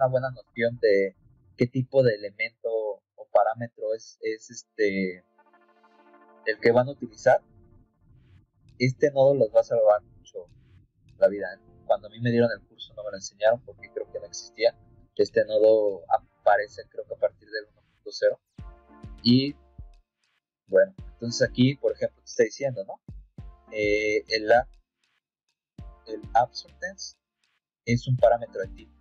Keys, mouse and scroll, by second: 8.3-12.0 drag, 20.2 click, 21.4 scroll up 2.